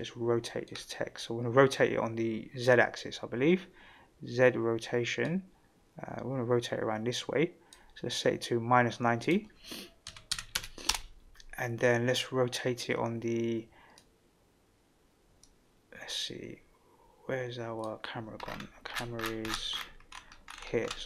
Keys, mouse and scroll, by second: 5.2-7.8 drag, 9.2-11.5 drag, 14.0-17.9 drag, 18.4-19.8 scroll down 9, 20.0-21.0 scroll up 4.